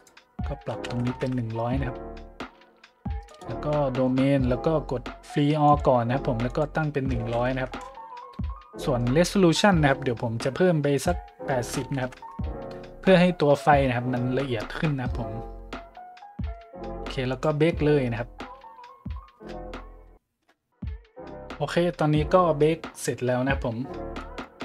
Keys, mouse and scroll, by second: 0.7 KP_1, 0.9 KP_0, 1.2 KP_Enter, 2.4 middle click, 3.2 right click, 3.8 middle click, 4.0 middle click, 4.3 middle click, 5.0 middle click, 5.6-6.0 drag, 6.4 click, 7.2 KP_1, 7.3 KP_0, 7.7 KP_Enter, 8.2-9.4 scroll up 8, 10.9 click, 11.8 KP_8, 12.0 KP_0, 12.2 KP_Enter, 13.7 middle click, 17.3 click, 24.1-24.5 drag.